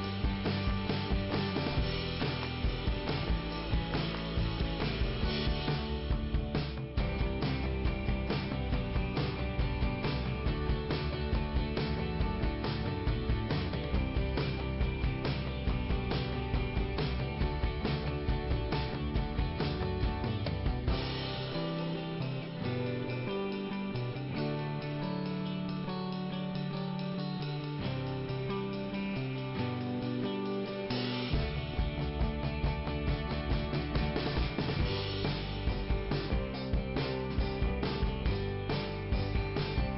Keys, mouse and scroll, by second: 1.5 click, 2.0 click, 5.9 scroll down 1, 6.6 middle click, 7.5 i, 8.5 scroll down 2, 9.2 click, 12.0 alt+i, 13.5 click, 16.8 click, 17.2 right click, 17.7 scroll down 2, 19.6 click, 19.6 scroll up 1, 21.3 click, 25.4 click, 27.2 click, 30.1 click, 31.1 scroll down 4, 31.2 click, 34.0 click, 36.6 click.